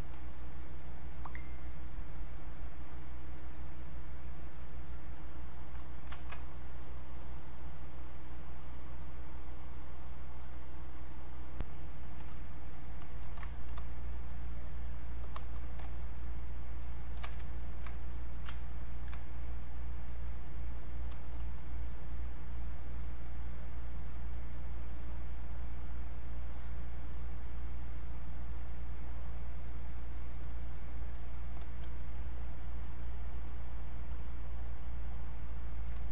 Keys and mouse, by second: 1.0-3.8 drag, 11.6 click, 13.7 shift+f, 16.3-23.2 ctrl+shift+drag, 23.2-25.0 drag.